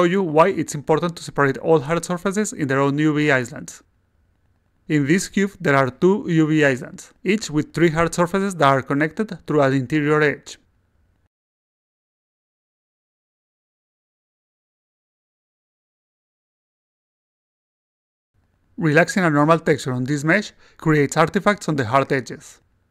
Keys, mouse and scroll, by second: 6.7-8.5 alt+drag, 9.1 click, 9.6-10.5 drag, 11.5 click, 12.2 click, 12.8 click, 13.6-14.2 drag, 14.8 click, 15.4 click, 15.7 click, 16.2 click, 17.1 click, 17.6 click, 18.1 click, 19.2 click, 20.6-22.0 alt+drag, 22.5-22.9 alt+right drag.